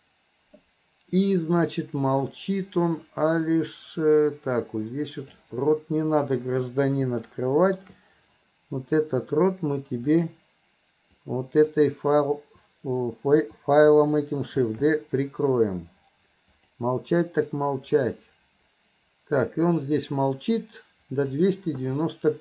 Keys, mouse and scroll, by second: 1.8-5.5 drag, 7.3-7.9 middle drag, 10.2 click, 11.2-11.8 drag, 17.6-21.4 drag.